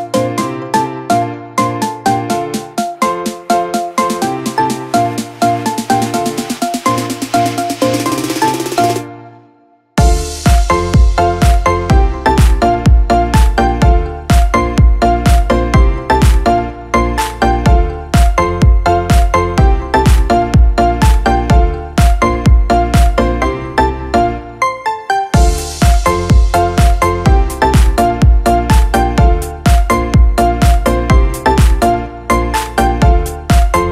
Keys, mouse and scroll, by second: 9.3 ctrl+d, 11.9 shift+click, 16.1-17.7 typing, 18.7 shift+1, 19.3 Caps_Lock, 21.0 shift+click.